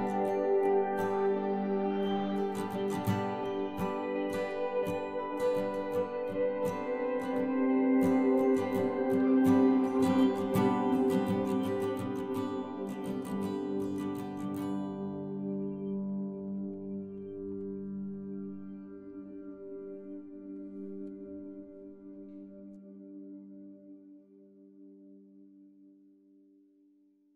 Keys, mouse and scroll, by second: 1.9 Tab, 3.7 ctrl+r, 6.1 ctrl+Tab, 7.1 c, 12.0-13.5 right drag, 13.5-15.7 middle drag, 16.6 ctrl+r, 19.2 ctrl+r, 21.6 ctrl+r, 22.5 ctrl+Tab, 24.9 ctrl+Tab, 26.3 ctrl+r.